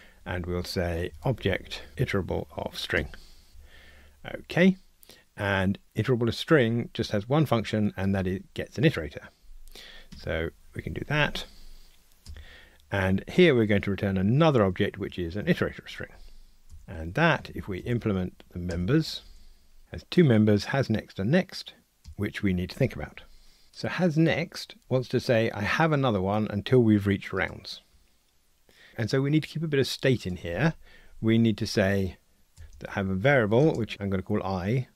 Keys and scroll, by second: 1.9 Return, 2.9 Tab, 10.1 Tab, 15.4 Tab.